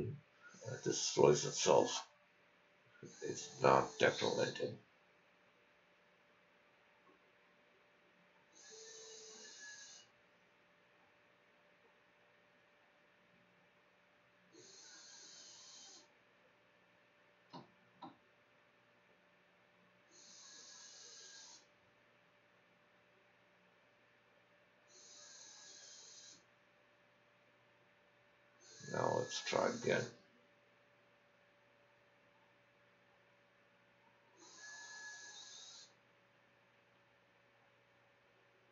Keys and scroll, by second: 0.5-1.6 typing, 2.5 Return, 3.3-4.3 typing, 6.1 ctrl+z, 6.3 ctrl+c, 6.9 ctrl+v, 7.5-16.0 typing, 13.8 Tab, 20.1-23.2 typing, 23.8 ctrl+z, 24.2 ctrl+s, 24.8 d, 25.5 e.